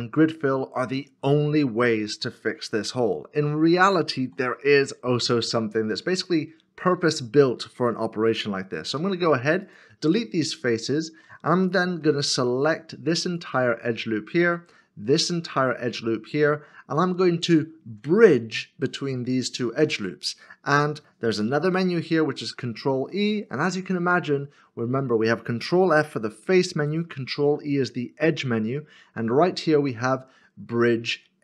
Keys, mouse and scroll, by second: 4.2 3, 6.3 alt+click, 8.9 x, 11.9 2, 13.3 alt+click, 15.2 alt+shift+click, 17.5 alt+shift+click, 17.5 alt+shift+click, 22.9 ctrl+e.